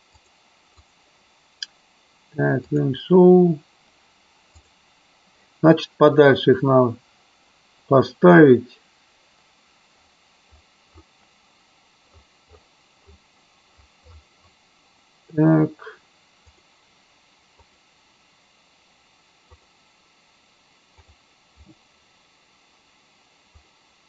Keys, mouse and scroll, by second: 0.2 click, 2.8 click, 16.6-18.6 drag, 19.6-21.5 drag, 23.6 click.